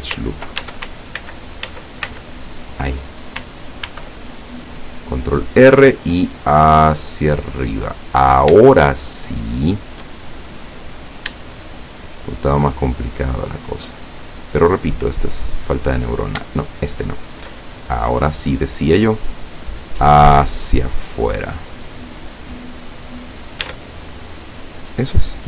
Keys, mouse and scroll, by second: 0.7 ctrl+Tab, 1.3 ctrl+z, 3.9 ctrl+r, 5.2 click, 7.5 click, 7.8-8.6 scroll up 2, 8.8-10.2 shift+middle drag, 11.2 shift+right click, 11.7 shift+right click, 12.1 shift+right click, 13.2 shift+right click, 13.6 shift+right click, 14.3-15.6 shift+middle drag, 17.1 shift+right click, 18.1 middle click, 19.7-22.4 drag, 22.5 scroll down 1, 22.8-23.8 middle drag, 23.7 Tab, 24.3-25.4 middle drag.